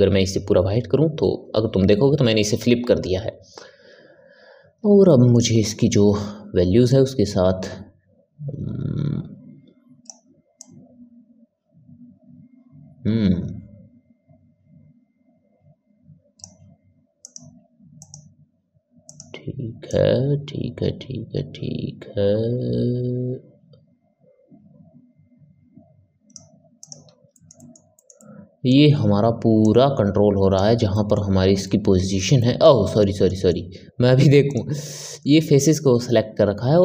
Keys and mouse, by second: 5.0-6.8 ctrl+middle drag, 6.8-9.8 drag, 10.5-17.2 drag, 27.2-29.5 ctrl+middle drag, 29.5 click, 30.8-34.4 middle drag, 34.4-36.8 drag.